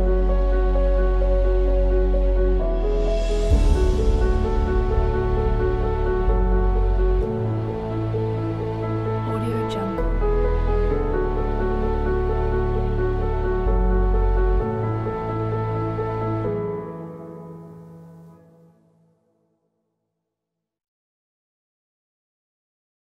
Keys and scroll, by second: 5.0 space, 7.1 space, 10.5 space, 15.1 space.